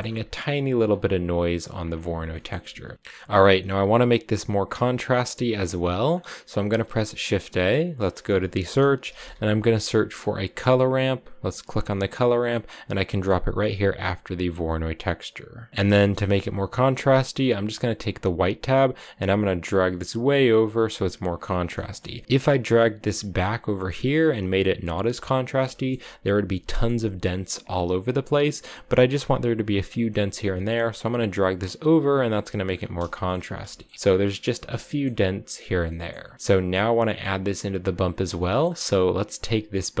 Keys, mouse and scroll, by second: 1.0-1.6 scroll down 2, 1.6-2.4 scroll down 7, 2.1 shift+middle click, 2.9-4.1 scroll up 5, 4.1-5.9 middle drag, 4.3-5.3 scroll down 2, 5.8 scroll up 2, 6.6 shift+a, 14.1-15.7 drag, 15.7 scroll up 2, 15.8-17.9 middle drag, 17.9-21.0 drag, 21.4 scroll down 2, 21.6 shift+middle click, 22.2-24.6 drag, 25.5 shift+middle click, 26.5 scroll up 1, 26.7-29.6 shift+middle drag, 29.9-32.9 drag, 32.9 shift+middle click, 33.4-34.6 scroll up 3, 33.5 shift+middle click, 34.6 scroll up 1, 34.7 shift+middle click, 35.5-36.1 scroll down 6, 35.7 middle click, 36.1-37.7 middle drag, 37.7 click, 38.2 middle click, 38.4-38.9 scroll up 5, 38.9-40.0 drag.